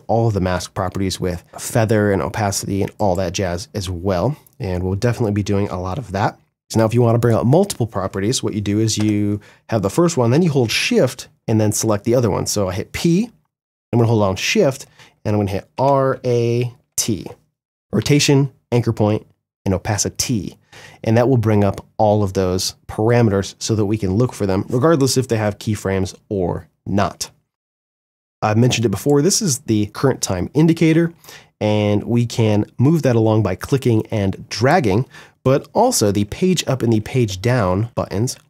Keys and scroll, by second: 8.1 p, 14.9 shift+r, 15.2 shift+a, 16.0 shift+t, 35.1 Page_Up.